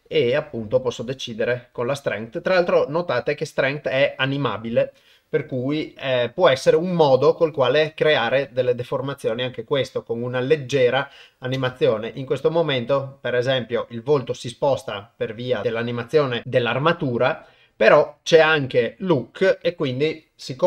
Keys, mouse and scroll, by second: 1.0 click, 6.0 g, 11.6 shift+space.